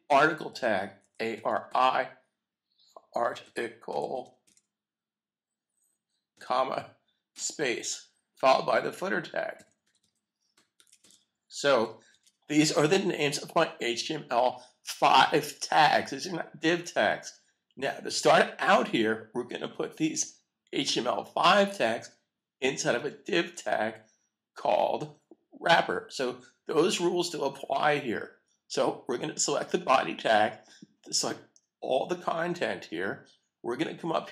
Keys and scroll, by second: 2.9-3.6 typing, 4.9 typing, 6.3 ,, 7.1 ,, 10.9 typing, 12.1 super+s, 13.1 typing.